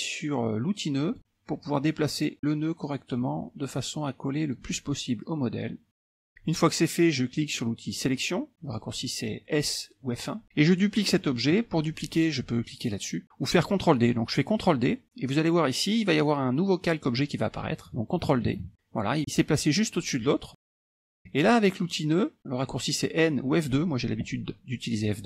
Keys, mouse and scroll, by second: 1.1 click, 2.1-4.9 drag, 5.9 click, 8.7 click, 18.6 ctrl+d, 20.8 click, 21.2 ctrl+z.